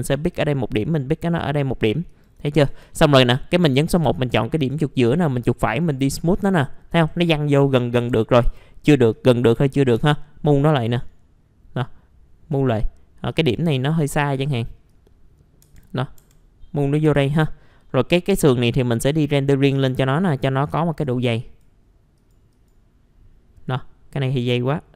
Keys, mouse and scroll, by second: 0.3 click, 2.1 right click, 2.7-3.6 typing, 3.8 click, 4.6 right click, 5.7 click, 8.0 F3, 8.2-8.9 typing, 9.1 click, 9.9 F3, 13.3 click, 13.7 scroll up 1, 14.9 click, 15.6 F3, 17.4 middle click, 19.7-24.9 drag.